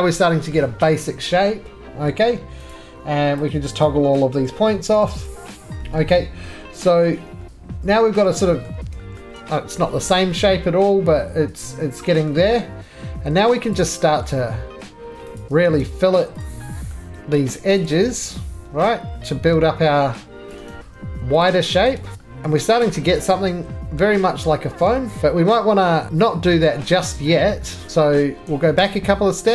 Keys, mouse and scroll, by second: 0.5 middle click, 0.5 middle click, 0.6 middle click, 2.1 middle click, 2.2 middle click, 2.3 middle click, 2.5 middle click, 2.7 click, 3.7 scroll, 3.8 click, 4.3 z, 4.6 scroll, 5.0 middle click, 5.2 scroll, 5.3 click, 6.4 middle click, 6.8 3, 8.2 middle click, 8.3-9.2 scroll, 8.7 middle click, 9.2 shift+middle click, 9.3 shift+middle click, 10.1-12.2 scroll, 12.2 shift+middle click, 13.3 2, 13.7 click, 14.3 middle click, 14.3 scroll, 15.4 shift+click, 16.4 click, 16.9-17.4 scroll, 17.4 shift+middle click, 17.8 shift+click, 20.5 click, 20.7 right click, 20.8 2, 21.4 click, 21.9 middle click, 22.1 right click, 22.1 shift+click, 22.6 middle click, 22.6 scroll down 12, 23.1 shift+middle click, 23.1-24.0 scroll, 24.0 middle click, 24.1-24.8 scroll, 24.8 shift+middle click, 25.2 shift+middle click, 25.2-25.7 scroll up 11, 26.4 scroll, 27.9 scroll, 28.4 ctrl+z, 28.4 middle click, 28.8 ctrl+z.